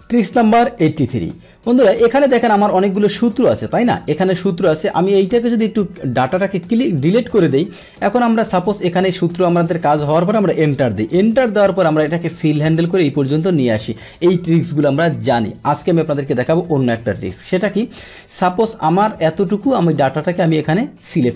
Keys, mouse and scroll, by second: 2.1 click, 2.8 click, 3.2 click, 3.5-4.5 drag, 4.9-6.4 drag, 6.4 Delete, 7.5 click, 9.6 click, 10.6 Return, 11.0 click, 12.1 click, 16.7 ctrl+z, 17.5 click, 18.4-21.3 drag.